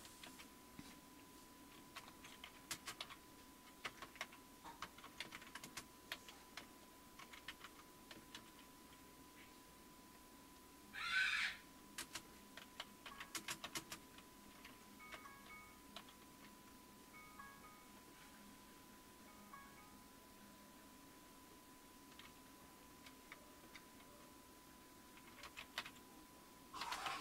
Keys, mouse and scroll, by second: 0.2 Up, 1.7-8.8 typing, 12.0-16.0 typing, 23.6 BackSpace, 25.0-27.2 typing.